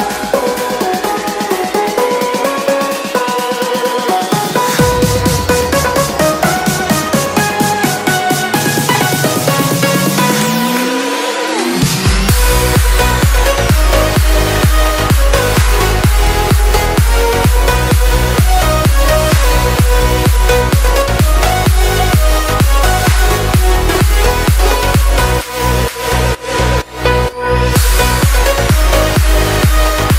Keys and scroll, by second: 13.0 Return.